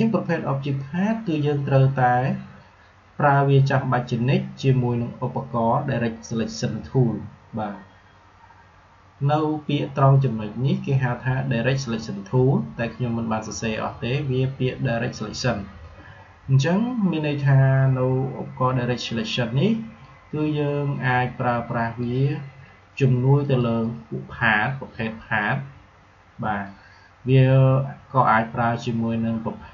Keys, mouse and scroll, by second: 19.8-28.8 drag.